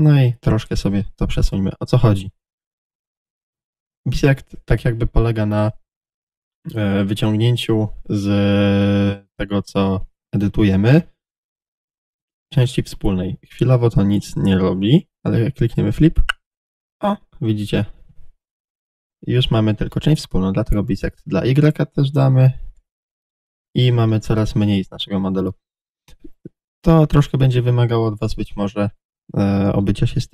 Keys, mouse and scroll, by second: 0.8 click, 1.0-7.6 middle drag, 11.5-15.9 middle drag, 15.9 click, 16.4-21.1 middle drag, 18.7 a, 21.1 click, 21.7-30.3 middle drag, 24.4 Tab.